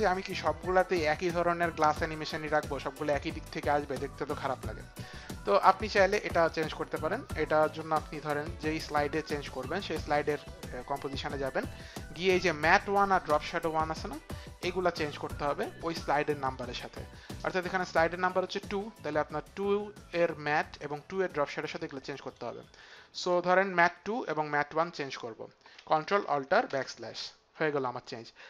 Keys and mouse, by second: 9.9 click, 12.6 click, 20.4 click, 24.6 click.